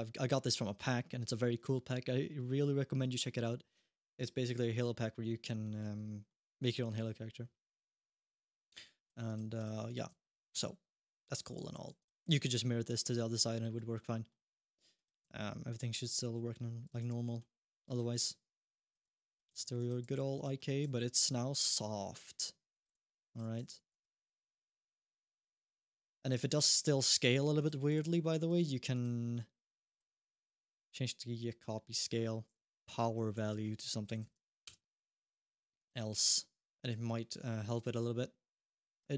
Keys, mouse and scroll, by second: 5.4 middle click, 6.1 middle click, 8.2-8.8 scroll up 1, 8.8 click, 9.0 click, 9.4 ctrl+Tab, 9.6 click, 10.0 shift+middle click, 10.3 middle click, 10.7 scroll up 1, 10.9 middle click, 11.3 g, 12.0 middle click, 12.2 alt+g, 13.5 middle click, 13.8 scroll down 1, 14.1 middle click, 14.7 click, 15.0 g, 15.7 middle click, 16.0 g, 16.9 alt+g, 17.0 middle click, 17.6 click, 18.0-20.6 typing, 20.3 middle click, 22.7 r, 23.4 r, 23.9 g, 26.1 alt+g, 26.2 alt+r, 26.3 scroll up 1, 26.6 middle click, 27.3 click, 27.7 g, 28.7 click, 29.7 click, 33.2 shift+click, 34.2 5, 35.5 click, 35.9 click, 36.6 click, 37.5 click, 37.7 click, 38.7 click.